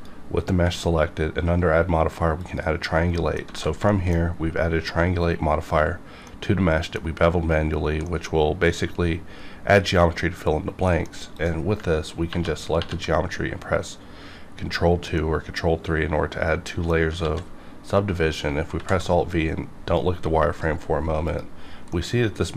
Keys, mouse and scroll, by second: 3.1 middle click, 3.5 alt+a, 3.9 shift+middle click, 7.2 scroll up 1, 8.1 middle click, 10.5 scroll down 1, 10.9 middle click, 11.4 click, 12.3 ctrl+2, 12.8 ctrl+3, 15.2-17.2 middle drag, 17.2 alt+a, 18.7 v, 19.3-21.3 drag, 21.9 middle click, 22.1 middle click.